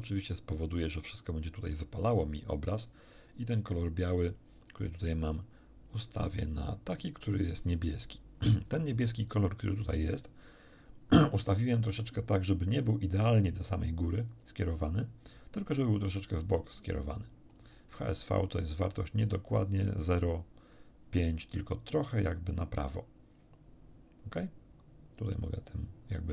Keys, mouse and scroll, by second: 3.6 click, 4.7 click, 5.9-7.9 drag, 12.9 click, 14.7-16.9 drag, 17.5 click, 23.3-26.3 drag.